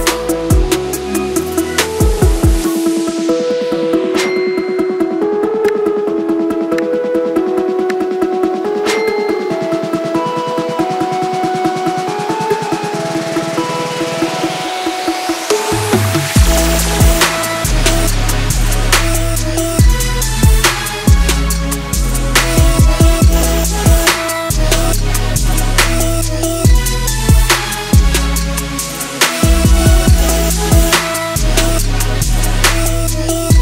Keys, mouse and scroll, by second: 9.6-15.8 drag, 21.8-27.4 drag, 28.5 click.